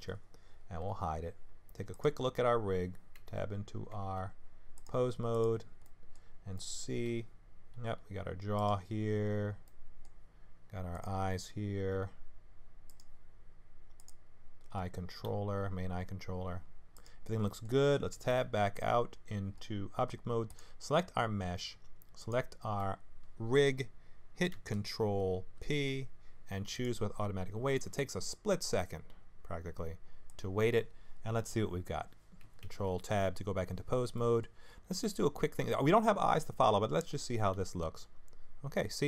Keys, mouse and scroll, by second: 0.8 h, 1.9 click, 3.2 Tab, 3.9 Tab, 5.3 click, 5.8 middle click, 6.5 middle click, 7.1 r, 10.1 middle click, 10.9 click, 11.9 g, 15.2 g, 17.4 middle click, 18.3 ctrl+Tab, 20.5 click, 22.2 shift+click, 25.5 ctrl+p, 30.3 click, 32.6 ctrl+Tab, 34.1 middle click, 34.6-35.7 scroll up 1, 37.5 g.